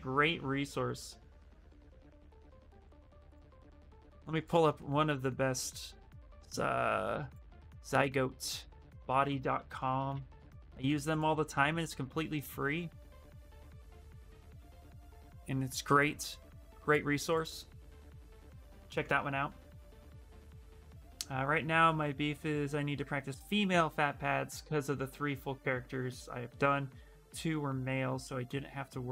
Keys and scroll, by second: 9.4 ctrl+a, 9.7 ctrl+c, 11.5 ctrl+v, 12.1 Return.